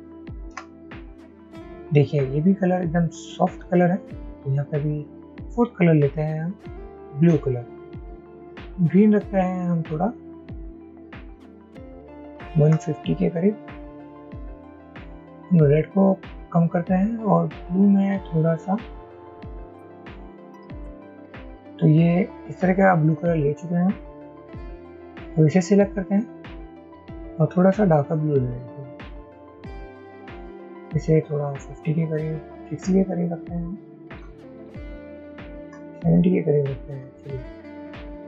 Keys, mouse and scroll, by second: 0.1 shift+Up, 0.9 Down, 11.7 shift+Up, 11.9 shift+Up, 12.1 shift+Up, 12.3 shift+Up, 13.1 Up, 20.2-21.3 typing, 31.1 shift+Up, 31.3 shift+Up, 31.5 shift+Up, 31.7 shift+Up, 31.8 shift+Up, 31.9 shift+Up, 32.1 shift+Up, 32.2 shift+Up, 33.4 shift+Down, 33.9 shift+Down, 35.3 shift+Up, 36.1 Down, 36.3 Down, 37.7 Up.